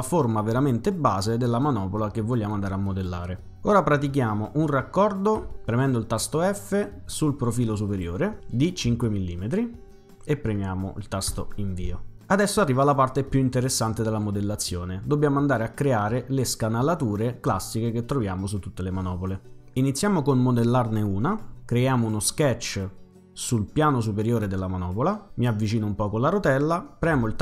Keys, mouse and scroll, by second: 5.5 f, 7.9 click, 8.9 5, 11.3 Return, 22.2 click, 24.3 click, 25.3 middle click, 25.3-26.1 scroll down 2, 27.1 c.